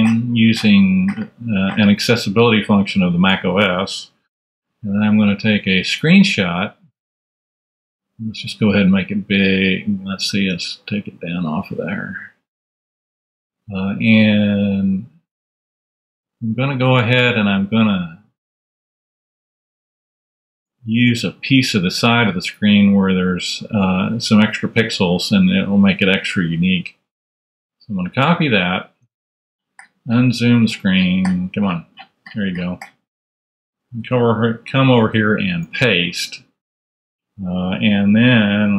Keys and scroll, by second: 4.9 shift+super+4, 10.5 space, 35.5 super+v.